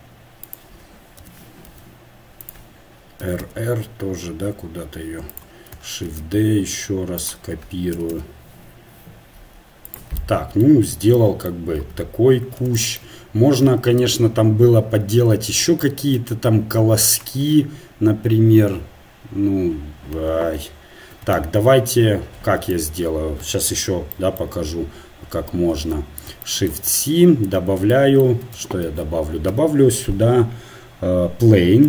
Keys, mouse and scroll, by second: 1.2 r, 3.8 r, 6.1 shift+d, 8.0 r, 11.8 Tab, 14.4 KP_1, 25.9 shift+c.